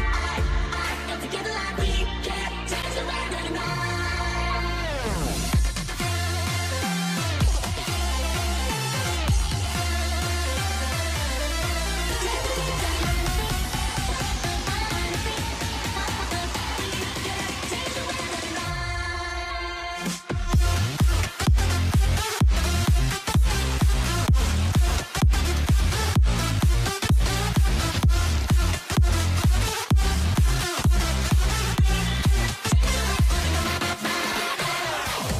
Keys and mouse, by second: 1.0 k, 2.8 k, 5.4 k, 7.8 k, 12.2 k, 15.1 shift+middle click, 17.7 k, 20.1 k, 22.9 ctrl+z, 23.4 alt+a, 24.0 shift+middle click, 27.9 k.